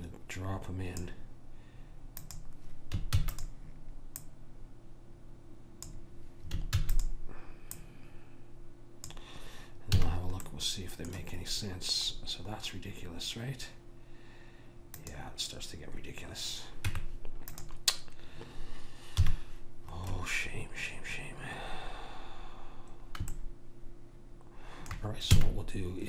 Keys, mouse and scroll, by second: 2.4 click, 3.2 shift+d, 7.0 shift+d, 7.9 click, 10.1 a, 15.1 click, 17.0 Tab, 19.3 KP_1, 22.9-25.2 middle drag, 25.5 a.